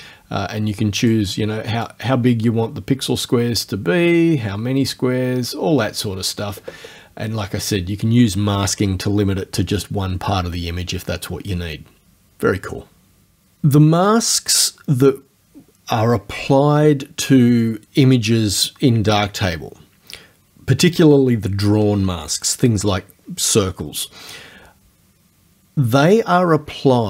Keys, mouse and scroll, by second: 1.9-6.2 drag.